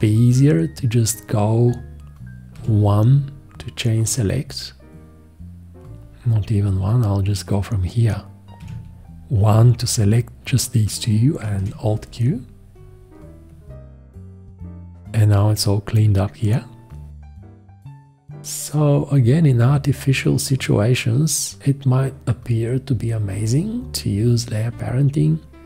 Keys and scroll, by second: 2.5 1, 8.6 1, 11.5 alt+q.